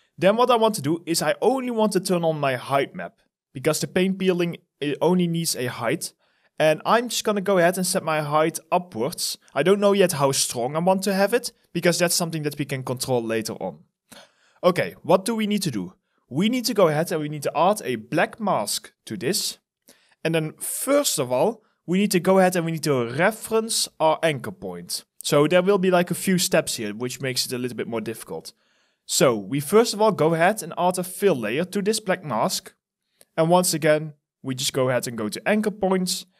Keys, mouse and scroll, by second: 6.1 alt+right click, 13.8 alt+middle click.